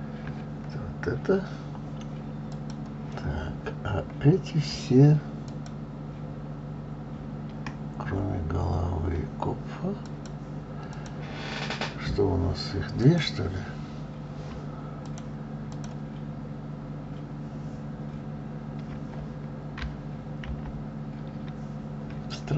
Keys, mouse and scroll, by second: 2.8 click, 4.3-5.8 scroll up 5, 5.8 shift+click, 8.2-10.3 scroll down 3, 10.3 click, 11.2 click, 13.3 click, 15.4 shift+click, 16.0 shift+click.